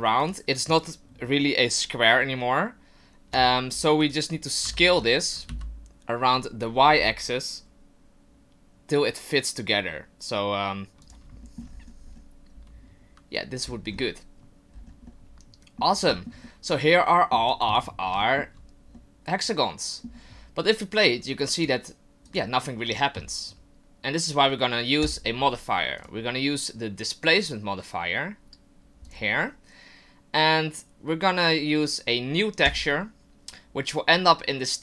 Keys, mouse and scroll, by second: 0.2 shift+right click, 3.3 Tab, 3.7 scroll down 2, 4.6 right click, 4.6 s, 11.4 shift+middle click, 11.7-12.5 scroll up 8, 12.5-13.6 scroll down 2, 13.6-14.4 scroll down 11, 14.7-15.1 scroll down 4, 15.1 middle click, 16.1 shift+middle click, 16.4 middle click, 17.5 right click, 18.2 shift+middle click, 18.9 middle click, 21.6 click, 22.2 click, 23.8 middle click, 25.0 click, 26.0 click, 32.6 click.